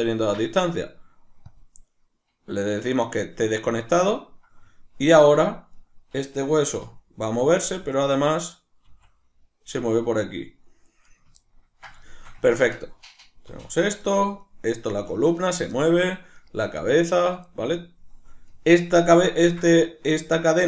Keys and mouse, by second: 5.8 right click, 6.7 r, 8.0 right click, 8.2 right click, 8.4 right click, 8.9 r, 11.2 right click, 11.4-13.0 ctrl+middle drag, 13.0 right click, 13.5 r, 14.4 right click, 14.9 r, 15.5 right click, 15.8 shift+middle click, 16.4 right click, 16.6 r, 17.2 right click, 19.5-20.5 ctrl+shift+middle drag, 20.5-20.6 right drag.